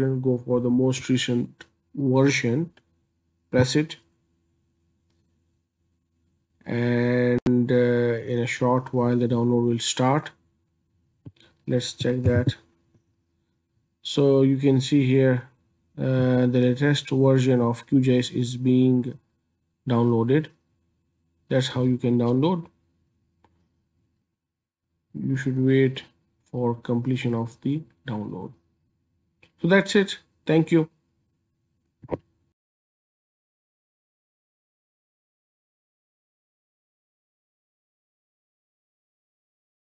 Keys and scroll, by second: 12.3 ctrl+j.